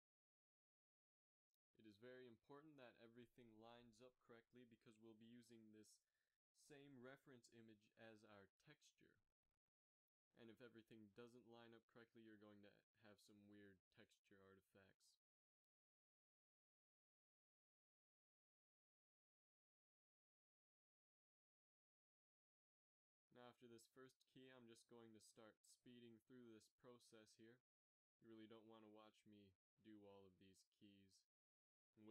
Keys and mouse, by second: 1.8 g, 7.3 ctrl+Tab, 11.9 ctrl+1, 16.3-18.2 drag, 19.5 ctrl+r, 22.4 ctrl+r, 25.1 ctrl+r, 29.1 a, 29.5 a, 30.7 a, 30.9 b.